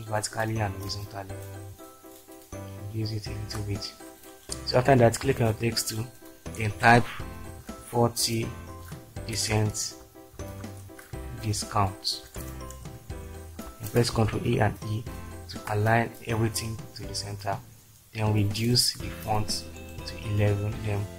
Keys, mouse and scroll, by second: 7.5-8.6 typing, 9.3 Return, 10.5-12.9 typing, 14.1 ctrl+a, 14.5 ctrl+e, 15.3 ctrl+space.